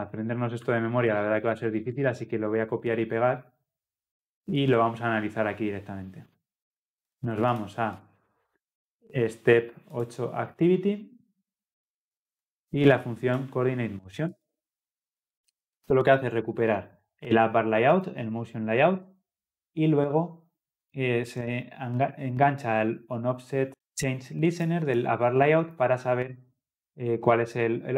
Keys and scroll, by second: 14.4 ctrl+v.